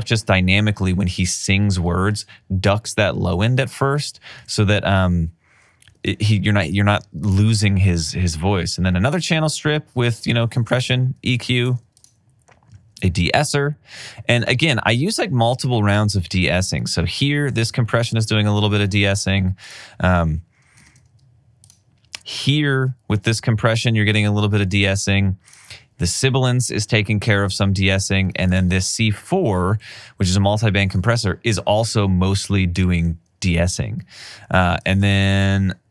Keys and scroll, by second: 4.5 alt+super+w, 10.8 alt+super+w, 13.1 alt+super+w, 18.9 alt+super+w, 20.9 alt+super+w, 24.4 alt+super+w, 27.6 alt+super+w, 34.0 alt+super+w.